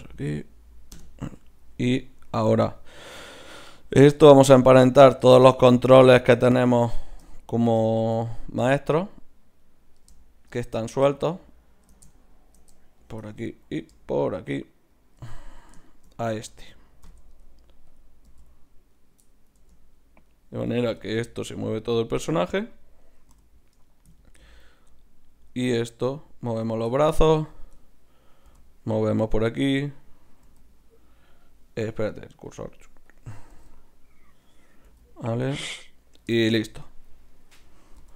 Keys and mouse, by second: 1.4-4.1 middle drag, 4.1-6.0 right drag, 6.0 z, 7.6-9.1 middle drag, 17.0 ctrl+p, 18.3 z, 19.0-20.2 right drag, 19.6 Tab, 20.9 g, 23.3 g, 24.9-26.4 drag, 25.6 g, 26.4 right click, 27.5-29.2 drag, 28.5 g, 29.2 middle click, 29.9-31.5 right drag, 30.4 r, 33.1-34.7 drag, 33.6 r, 34.8-35.8 right drag, 34.9 r, 35.8-38.1 middle drag, 38.0 g.